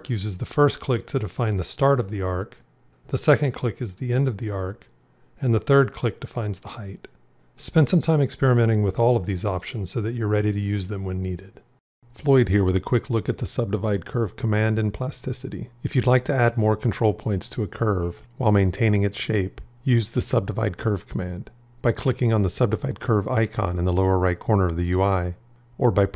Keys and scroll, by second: 25.5 alt+1.